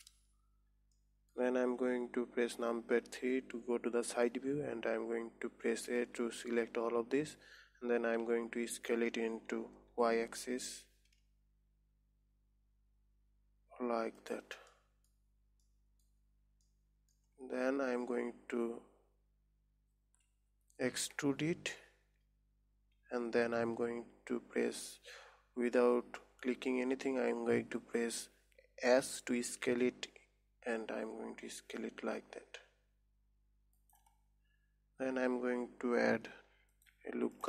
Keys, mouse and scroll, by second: 1.4-3.6 middle drag, 3.6 KP_3, 4.7 scroll up 3, 6.4 a, 8.7 s, 15.2 middle click, 15.6 scroll down 4, 16.1 middle click, 16.6-17.1 scroll up 3, 17.1 middle click, 21.5 e, 34.7 scroll up 3, 36.6 ctrl+r.